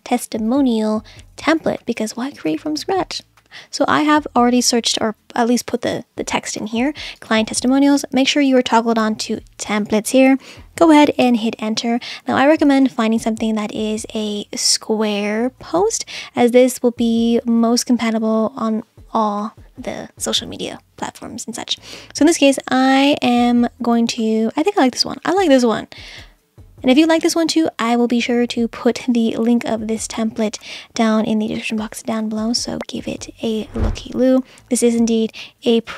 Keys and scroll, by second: 11.2 Return.